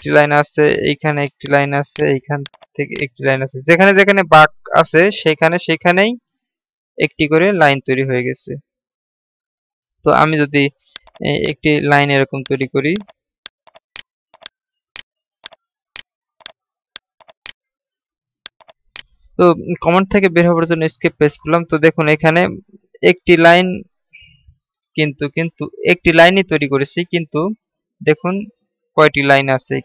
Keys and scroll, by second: 21.6 Escape.